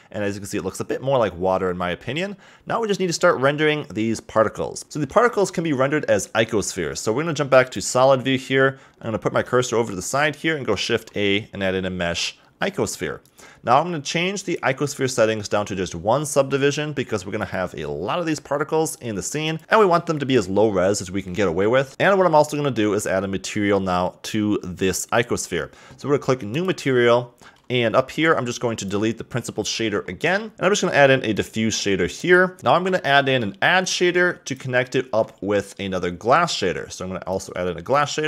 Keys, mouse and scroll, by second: 0.0-2.2 middle drag, 2.2-4.8 scroll up 1, 4.8-7.8 shift+middle drag, 7.8 click, 8.3-9.8 scroll up 1, 9.8 shift+right click, 10.8 shift+a, 14.4 click, 17.4-18.6 drag, 19.4 click, 19.6-21.6 shift+middle drag, 21.9-23.0 drag, 23.0 scroll up 2, 26.5 click, 28.1 n, 28.7 click, 29.7 x, 30.0-30.4 scroll up 3, 30.4 middle click, 32.6 x, 32.7 shift+a, 34.9 shift+a.